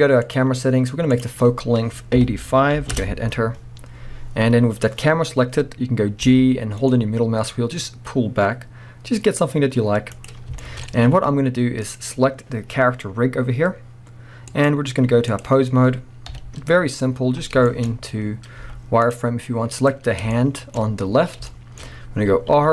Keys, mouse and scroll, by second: 1.1-10.3 drag, 3.0 Return, 4.5-4.9 scroll down 1, 6.2 g, 10.6-11.8 shift+middle drag, 10.8 scroll up 1, 11.8 click, 14.5-17.7 drag, 16.3 KP_1, 17.1 scroll up 1, 17.7-19.7 shift+middle drag, 17.9 scroll up 1, 18.6 z, 19.7 click, 20.1 scroll down 1, 20.3-22.7 shift+middle drag, 20.8 scroll up 1, 21.3 scroll down 1, 21.8 scroll up 1, 22.5 r.